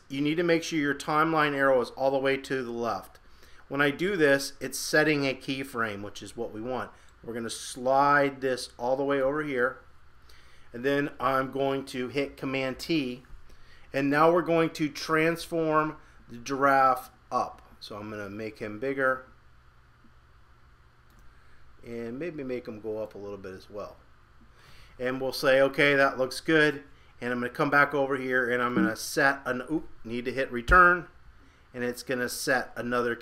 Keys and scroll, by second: 12.7 super+t.